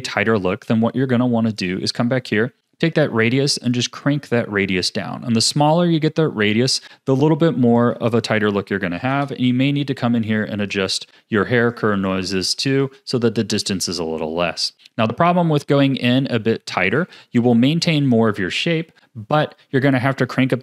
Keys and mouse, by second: 1.6 click, 2.6-7.8 shift+drag, 8.1-9.3 drag, 12.8 click, 13.6-16.9 shift+drag.